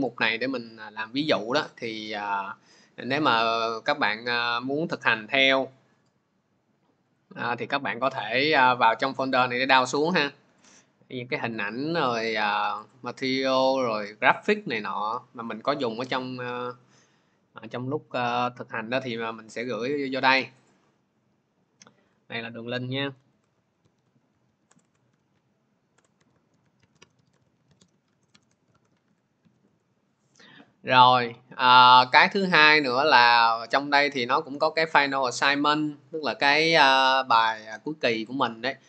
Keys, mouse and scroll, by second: 7.0 click, 8.1 click, 9.4-10.2 scroll, 10.5 click, 10.9 scroll, 11.5 click, 11.7-12.8 scroll, 12.8 click, 13.2 click, 13.8-14.2 scroll, 15.9 alt+Tab, 17.5 alt+Tab, 20.5 click, 22.9-28.7 typing, 23.5-24.8 drag, 29.2 ctrl+v, 34.2 Return, 34.2 click.